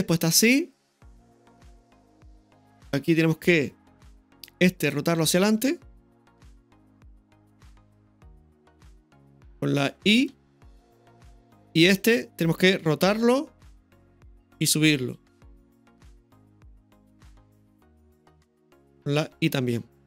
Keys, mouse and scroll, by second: 4.8 right click, 6.2 r, 10.3 r, 11.8-13.1 right drag, 14.2 r, 15.0 g.